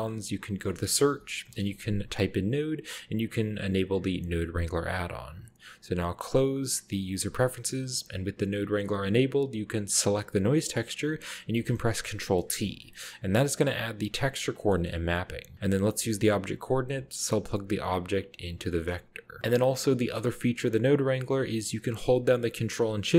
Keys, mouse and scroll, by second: 0.5 click, 1.1-1.7 typing, 2.5-3.5 drag, 7.1 click, 8.4 click, 9.4 click, 11.5 ctrl+t, 12.1-12.6 scroll down 1, 12.2-13.5 middle drag, 12.6-13.5 scroll up 1, 12.7 a, 14.7 middle click, 16.7-17.8 drag, 18.1 click, 18.7 click, 19.4 middle click, 19.4-22.5 scroll up 1.